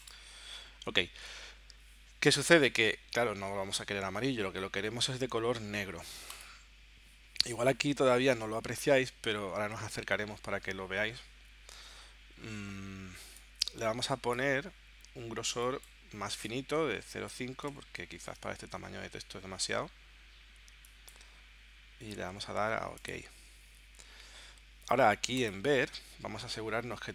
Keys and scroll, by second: 16.8-18.2 typing.